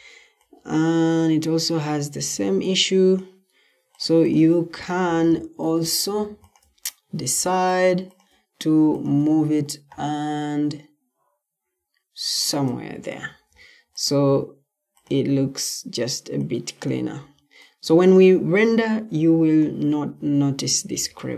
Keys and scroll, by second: 4.6 Escape, 7.1 Escape, 13.2 Escape.